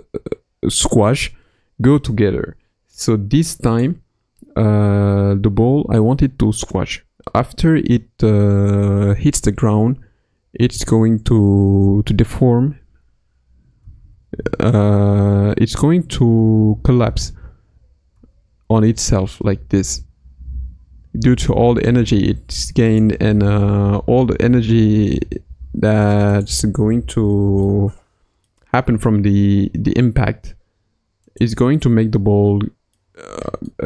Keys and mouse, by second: 9.0 Left, 9.4 Right, 10.6 Left, 10.8 Right, 13.8 s, 18.1 s, 24.4 g, 27.0 KP_Decimal, 27.6 middle click, 28.8 g, 31.7-33.0 middle drag, 33.7-33.8 middle drag.